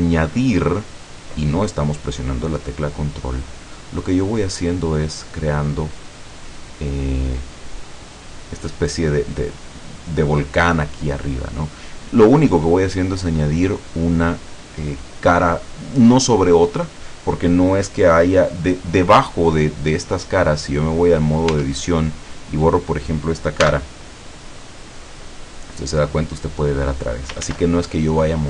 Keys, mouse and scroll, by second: 0.2 middle click, 1.5-3.0 drag, 3.1 click, 3.6-4.6 middle drag, 4.8 scroll down 1, 7.2 click, 8.1 click, 19.6 middle click, 20.8-21.1 scroll up 1, 21.3 scroll down 1, 21.6 Tab, 22.6 right click, 23.7 x, 25.1 click, 25.7-27.3 drag, 27.4 ctrl+z.